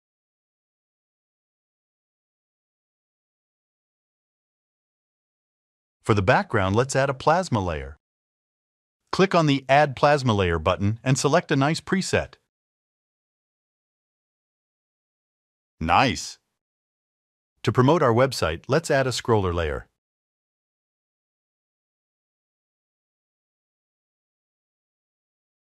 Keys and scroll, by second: 2.0 0, 2.5 1, 3.1 Tab, 3.6-4.7 typing.